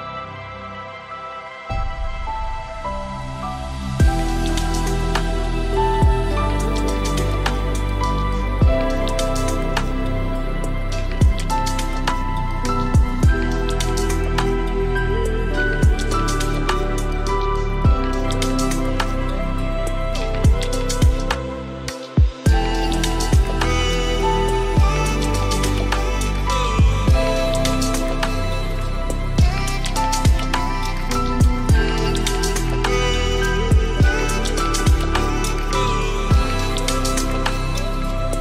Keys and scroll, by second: 21.1 ctrl+a, 23.9 ctrl+d.